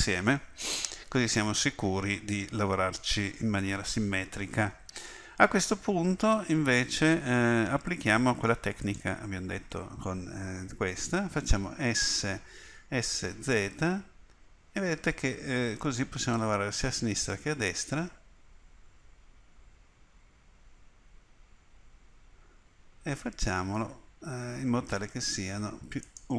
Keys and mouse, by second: 8.8-12.8 drag, 12.8 s.